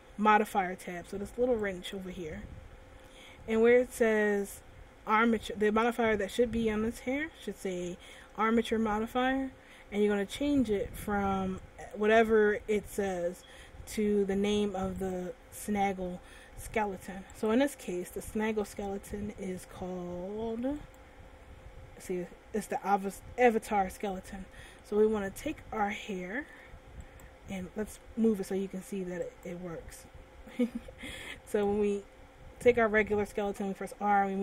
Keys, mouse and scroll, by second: 1.9 click, 11.8 click, 17.6 shift+click, 18.4-19.0 scroll down 1, 19.0 shift+middle click, 21.3 right click, 25.0 shift+middle click, 27.5 right click, 28.3 middle click, 29.7 right click, 32.3 right click, 33.9 r.